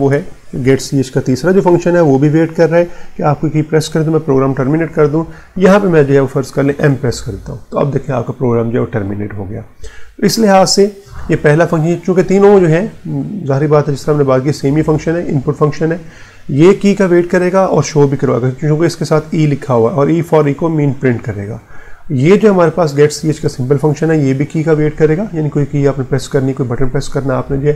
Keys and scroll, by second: 6.7 m.